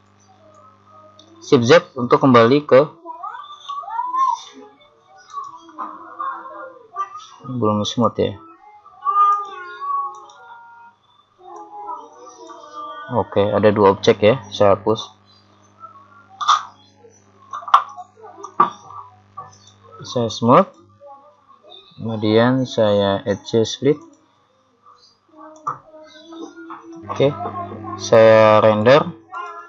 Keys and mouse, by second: 1.8 shift+z, 5.4 right click, 7.9 click, 9.4 right click, 11.6 right click, 12.5 click, 18.0 x, 19.6 right click, 20.7 click, 23.4-25.8 drag, 28.9 click.